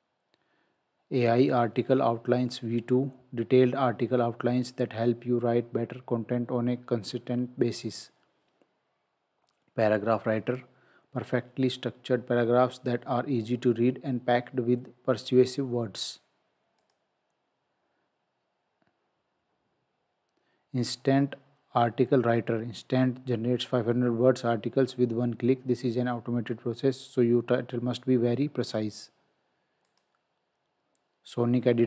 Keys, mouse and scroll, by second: 7.8 click, 16.8 click, 29.9 click.